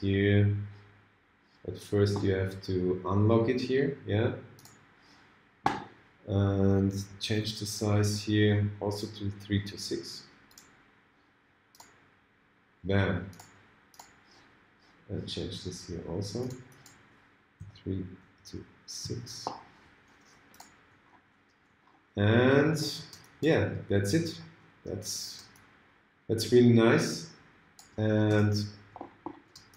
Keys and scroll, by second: 7.2 ctrl+alt+super+a.